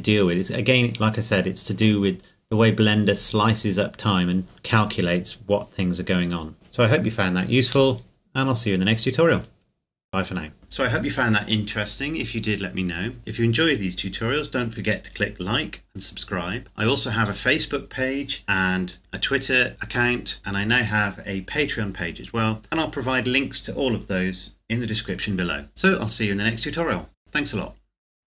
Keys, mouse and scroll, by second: 0.4 scroll up 1, 4.3 scroll down 1, 5.8 scroll down 1, 6.5 middle click.